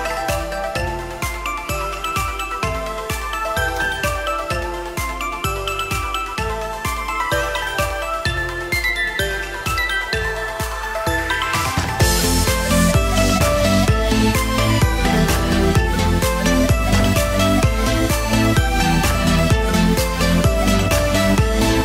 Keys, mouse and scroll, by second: 10.0 click, 10.4 click, 11.2 click, 11.5-12.2 scroll down 7, 12.2 shift+middle click, 12.5 middle click, 13.0 shift+middle click, 13.4 middle click, 14.5 middle click, 15.1 shift+middle click, 15.8 click, 18.5 shift+middle click, 18.9 scroll up 2, 19.1 shift+middle click, 21.3 Tab.